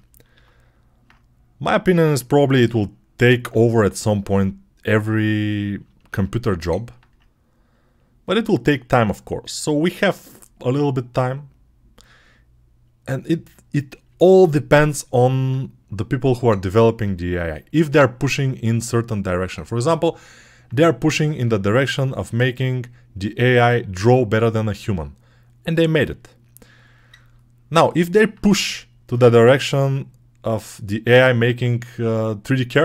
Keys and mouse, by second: 0.2 alt+q, 5.9-16.9 alt+drag, 16.9-21.2 right drag, 21.5-27.4 alt+drag, 27.4 alt+right click, 27.7 alt+right click, 28.1-32.8 drag, 32.7 alt+q.